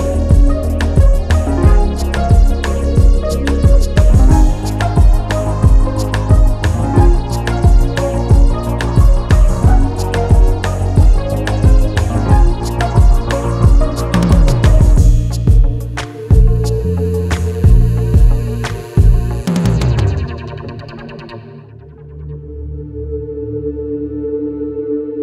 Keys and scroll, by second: 6.3 4, 7.3 3, 17.2 4, 18.2 3, 18.4 ], 20.1 Escape, 24.1 Return, 25.0 ].